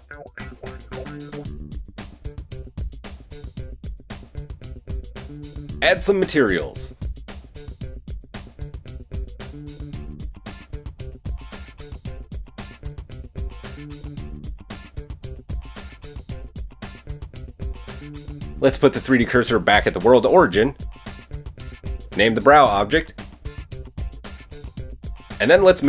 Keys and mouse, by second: 3.3 KP_1, 4.5-5.0 drag, 5.0-6.1 middle drag, 6.1 click, 6.2-7.2 middle drag, 7.2-14.6 drag, 9.5 middle click, 9.5 right click, 11.8-12.3 middle drag, 11.8-12.3 right drag, 13.3 KP_1, 15.4-22.8 shift+middle drag, 18.6 shift+s, 21.2 KP_1, 22.8-25.8 drag.